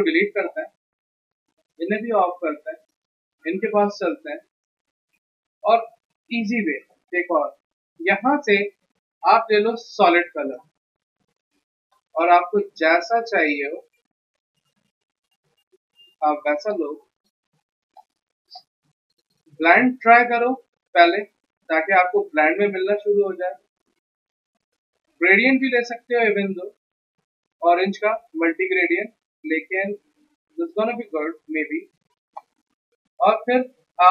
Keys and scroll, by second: 6.6 ctrl+z, 33.0 e.